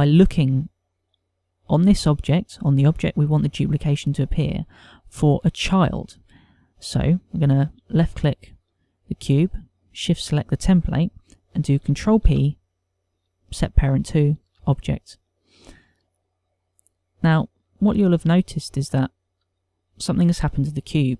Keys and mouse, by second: 7.3 click, 10.6 shift+click, 12.8 ctrl+p, 17.6 middle click, 19.0 ctrl+middle click, 19.8 shift+middle click, 20.9 ctrl+middle click.